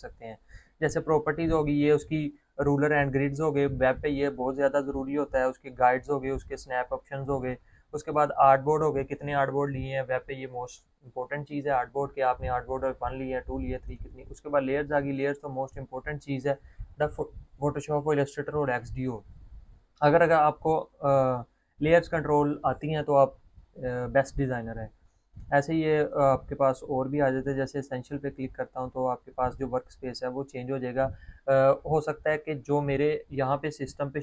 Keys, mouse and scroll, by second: 9.1 click, 14.8 click, 17.0 click, 27.1 click, 27.7 click.